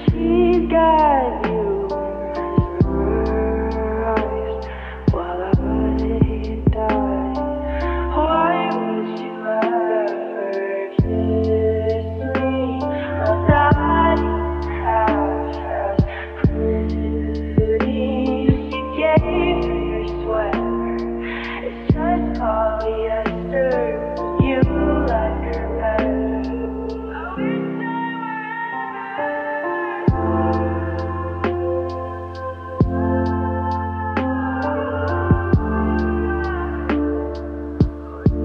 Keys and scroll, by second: 5.2 Delete, 16.2 ctrl+alt+f.